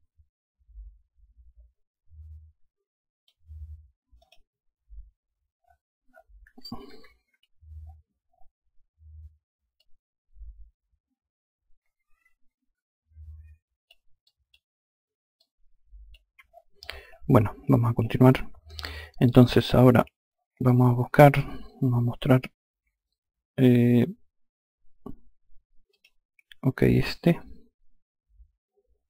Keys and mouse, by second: 3.7 click, 6.4 F2, 9.3 click, 13.7 click, 14.9 click, 25.4 click.